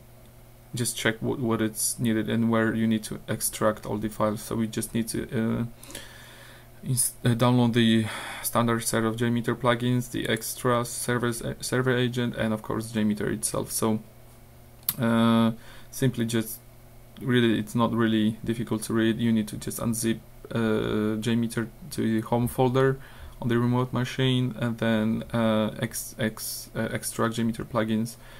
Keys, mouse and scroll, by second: 0.5-0.8 scroll down 2, 5.9 click, 10.3 click, 13.2-13.9 scroll down 4, 14.9-15.2 scroll down 2, 16.1 scroll down 2, 16.8 scroll down 2, 17.5 scroll down 2, 20.7-21.4 scroll up 2, 22.9 scroll down 2, 23.8 scroll down 2, 25.2 scroll down 2.